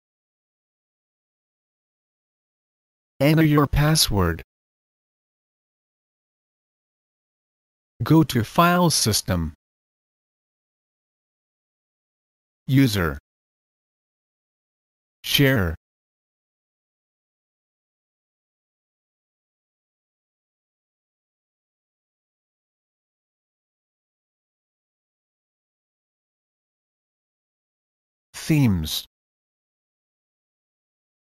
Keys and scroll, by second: 0.0 Return, 1.2 typing, 4.1 Return.